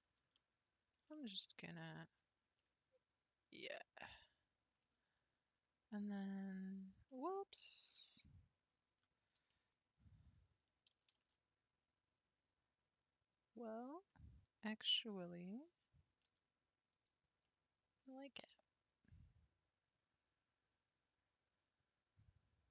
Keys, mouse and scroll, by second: 0.1 3, 0.6 click, 1.3 shift+click, 1.8 x, 2.6-5.6 middle drag, 9.5-10.5 middle drag, 10.5 click, 10.9 g, 15.8 click, 16.2 g, 17.4-20.6 middle drag, 21.5-22.3 scroll down 1.